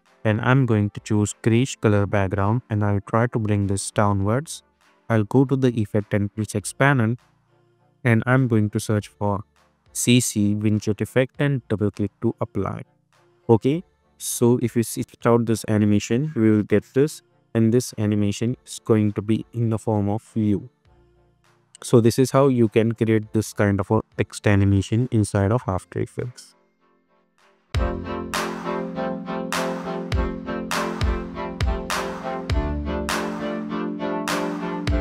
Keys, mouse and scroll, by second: 6.3 ctrl+a, 9.5-11.0 typing, 11.7 click, 14.9 space, 17.0 -, 26.7 space.